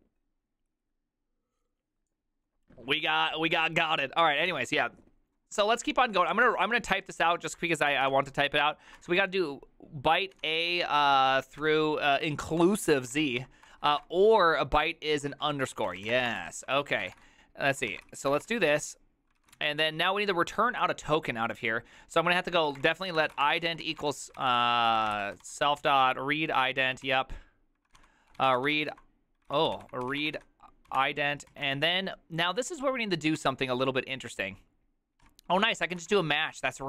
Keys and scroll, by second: 4.6 alt+{, 6.5-19.7 typing, 19.5 ctrl+c, 23.1-26.4 typing, 27.1 ctrl+c, 28.1-32.5 typing, 31.6 ctrl+y, 33.5 Return, 35.3 Tab, 35.3-36.8 typing.